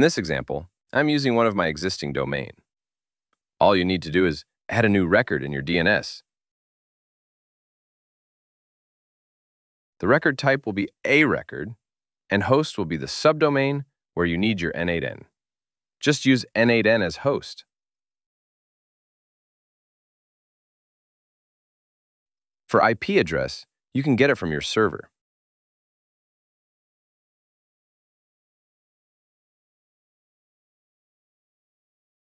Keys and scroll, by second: 28.2 super+c, 29.8 alt+super+Left, 31.9 super+v.